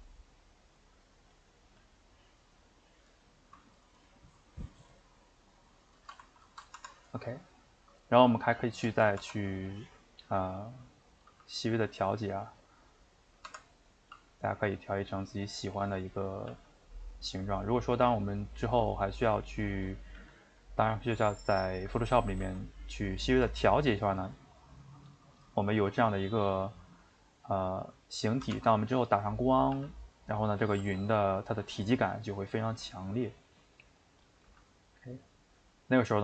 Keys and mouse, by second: 0.7 middle click, 1.3 click, 1.7 g, 3.1-6.9 shift+middle drag, 6.9 Tab, 7.0-9.3 middle drag, 9.3 Tab, 9.7 middle click, 10.7 click, 11.3 g, 13.0 middle click, 13.6 Tab, 13.9 click, 14.1 g, 16.2 click, 16.5 g, 19.3 middle click, 19.8 click, 20.2 g, 22.1 click, 22.4 g, 24.9 middle click, 25.8 g, 26.7-28.5 middle drag, 28.5 r, 29.3 middle click, 29.7 g, 30.6 click, 30.8 g, 33.6 middle click, 34.2 click, 34.4 g.